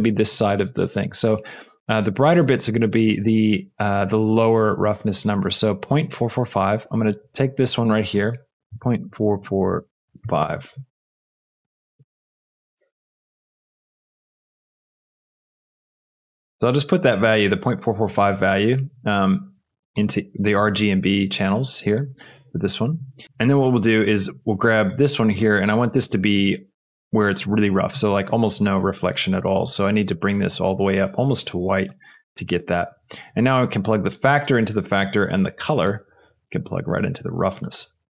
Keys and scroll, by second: 10.2 KP_5, 10.2 KP_4, 13.2 ctrl+c, 14.1 ctrl+v.